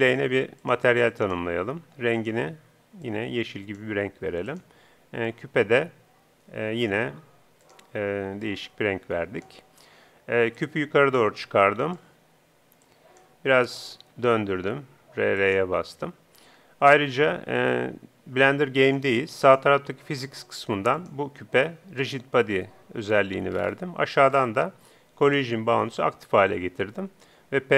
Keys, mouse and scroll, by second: 1.3-3.9 drag, 4.5-8.5 right drag, 8.5-9.6 drag, 10.6-12.4 drag, 11.6-13.2 middle drag, 12.9-14.6 drag, 13.2 right click, 14.0 r, 15.6-18.4 drag, 20.2-27.0 drag, 25.2-26.4 middle drag.